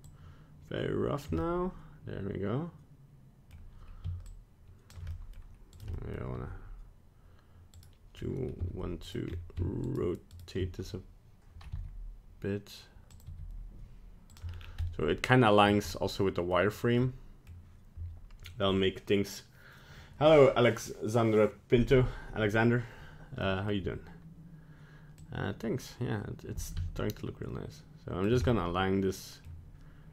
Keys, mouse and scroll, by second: 0.0 shift+click, 1.4 middle click, 4.2 shift+click, 5.1 middle click, 5.7 right click, 5.9 middle click, 6.3 r, 8.1 scroll up 1, 8.5 z, 9.2-9.8 scroll up 2, 9.8 shift+right click, 10.3 shift+right click, 11.7 r, 13.2 g, 14.3 g, 14.5 scroll down 3, 14.8 middle click, 15.6 middle click, 15.8 scroll up 1, 16.1 middle click, 16.7 right click, 16.9 middle click, 23.4 middle click, 25.1 click, 28.4 middle click, 29.4 middle click.